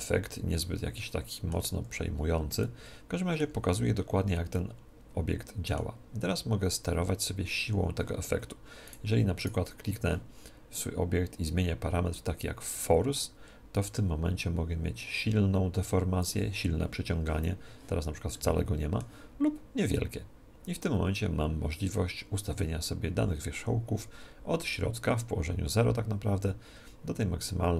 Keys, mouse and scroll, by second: 1.8-6.3 middle drag, 8.9-11.4 right drag, 12.5 click, 18.3-20.1 middle drag, 19.9 click.